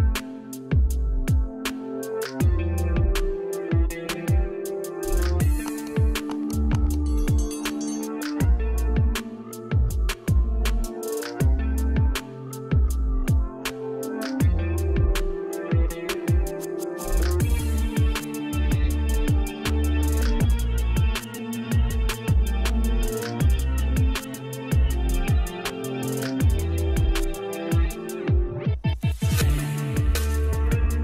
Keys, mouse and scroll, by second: 8.8-10.0 scroll up 1, 10.0 click, 13.6-20.8 drag, 23.2-31.0 drag.